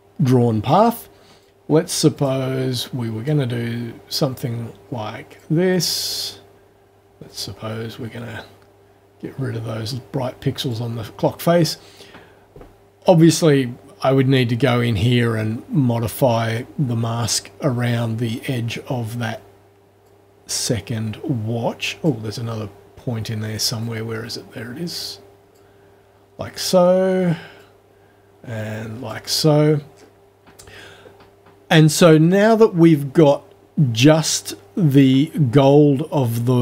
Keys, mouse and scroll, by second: 1.4 click, 2.2 click, 3.3-5.6 drag, 5.7 click, 7.3-10.9 drag, 13.0-13.3 scroll up 4, 15.1-17.4 drag, 20.1-22.2 drag, 23.8-25.7 drag, 27.6-29.3 drag, 29.9 scroll down 2.